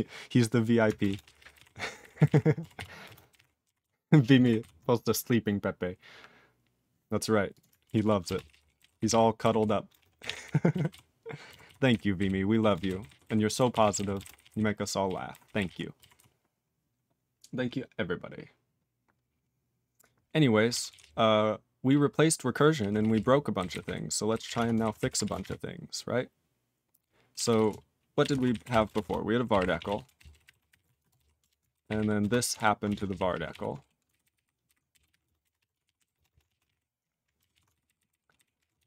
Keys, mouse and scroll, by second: 1.0 ctrl+space, 1.0 ctrl+a, 1.2 ctrl+p, 1.3 ctrl+p, 1.5 ctrl+e, 2.0 ctrl+g, 2.0 ctrl+n, 2.1 ctrl+n, 2.2 ctrl+g, 2.2 ctrl+e, 2.7 ctrl+s, 3.0 ctrl+space, 3.0 ctrl+a, 3.3 ctrl+e, 3.8 ctrl+s, 4.5 ctrl+s, 7.5 click, 7.5 click, 8.0 ctrl+s, 8.2 ctrl+space, 8.2 ctrl+a, 8.3 ctrl+p, 8.4 ctrl+p, 8.7 ctrl+g, 8.8 ctrl+n, 8.9 ctrl+n, 9.0 ctrl+g, 9.0 ctrl+e, 9.5 ctrl+s, 9.8 ctrl+space, 9.9 ctrl+a, 10.1 ctrl+g, 10.2 ctrl+e, 10.3 ctrl+n, 10.4 ctrl+n, 10.8 ctrl+s, 11.6 ctrl+s, 11.8 ctrl+n, 12.1 ctrl+n, 12.5 ctrl+a, 12.7 ctrl+space, 12.7 ctrl+e, 12.8 ctrl+n, 12.9 ctrl+n, 13.0 ctrl+e, 13.2 ctrl+g, 13.7 ctrl+s, 13.8 ctrl+n, 13.9 ctrl+a, 13.9 ctrl+n, 14.1 ctrl+space, 14.2 ctrl+n, 14.3 ctrl+n, 14.4 ctrl+e, 14.5 ctrl+n, 15.0 ctrl+e, 15.3 ctrl+g, 15.4 ctrl+n, 15.5 ctrl+n, 15.6 ctrl+e, 16.1 ctrl+s, 20.8 ctrl+s, 20.9-21.8 ctrl+p, 22.7 ctrl+p, 22.9 ctrl+p, 23.1 ctrl+p, 23.5 ctrl+n, 23.7 ctrl+n, 24.3 ctrl+o, 24.4 ctrl+o, 24.5-25.9 typing, 27.0-28.0 typing, 29.4-31.7 typing, 31.7 ctrl+n, 31.8 ctrl+n, 31.9 ctrl+e, 32.2 ctrl+space, 32.5 ctrl+alt+b, 32.8 alt+w, 33.0 ctrl+p, 33.3 ctrl+p, 33.5 ctrl+y, 34.2 alt+b, 34.3 alt+b, 34.6-36.7 typing, 37.5 ctrl+s, 37.7 alt+b, 37.8 alt+b, 37.9 alt+b, 38.0 alt+b, 38.3 alt+b, 38.5 alt+f, 38.7-38.8 typing.